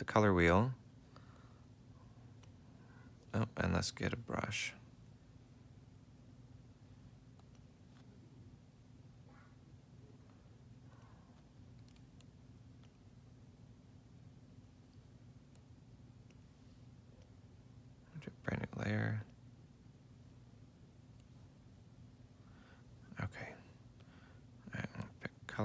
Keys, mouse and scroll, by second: 0.8 F6, 4.1-5.2 typing, 6.0 F4, 6.6 F5, 9.3 F5, 11.8 F5, 14.5 F7, 19.9 F7, 24.3 right click.